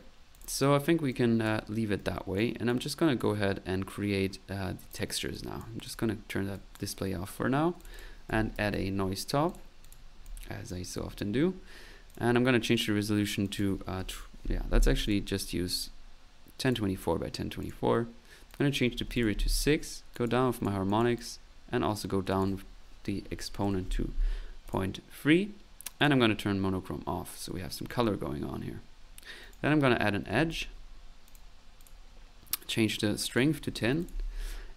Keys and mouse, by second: 0.3 click, 1.1 click, 2.0 right click, 2.7 click, 4.3 middle click, 4.9 click, 5.3 click, 6.5 click, 7.8 click, 8.0-9.2 typing, 9.5 click, 9.9 click, 10.3 click, 10.9 middle click, 12.1 click, 13.4 click, 15.1 click, 15.7 click, 16.6 click, 17.6 click, 18.5 click, 20.2-21.6 drag, 22.3 click, 24.7 click, 25.1 click, 26.0 click, 26.9 middle click, 29.4 right click, 30.0-30.8 typing, 31.3 click, 31.8 click, 33.2 click, 34.5 middle click.